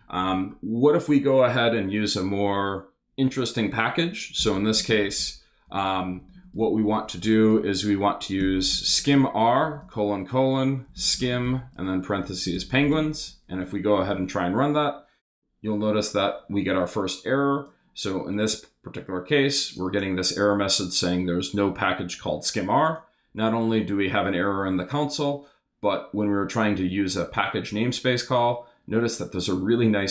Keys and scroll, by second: 0.2 Return, 4.1-6.2 typing, 8.2-9.6 typing, 10.6-13.5 typing, 13.5 super+Return.